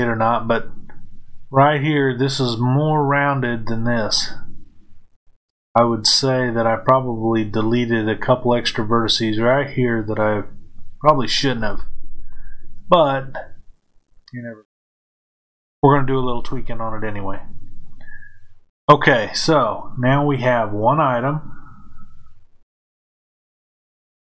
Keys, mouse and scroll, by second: 21.0 click, 23.1 click.